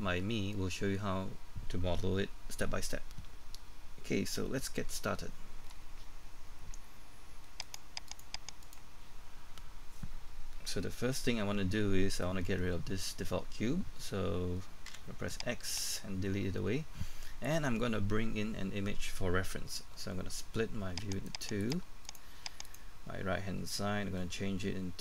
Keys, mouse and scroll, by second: 7.6 click, 9.6-10.1 scroll up 1, 10.1-11.4 scroll down 1, 11.4-14.8 scroll up 1, 14.9 x, 15.8 click, 21.1 right click, 21.6 click.